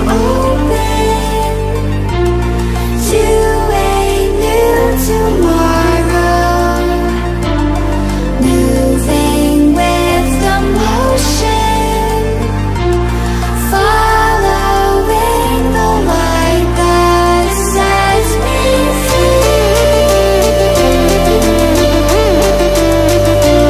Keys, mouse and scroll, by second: 0.0 ctrl+alt+scroll up 1, 2.1 click, 5.6 click, 19.7 click.